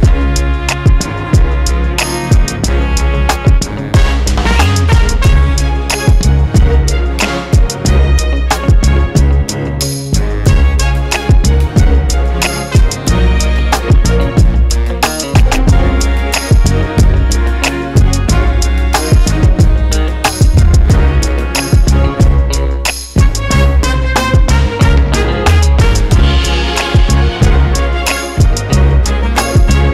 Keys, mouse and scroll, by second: 7.4 click, 8.1-14.2 drag, 9.8-11.8 scroll down 2, 11.8 scroll up 1, 15.4-18.8 drag, 16.2 scroll up 1, 16.4 scroll down 1, 16.9 KP_0, 17.4-17.7 scroll up 1, 18.0-18.4 scroll down 1, 19.1 scroll up 1, 21.0 scroll down 1, 21.6 click, 21.9 KP_Decimal, 23.8 scroll down 1, 24.0 scroll up 1, 25.0 click, 26.4-28.8 drag.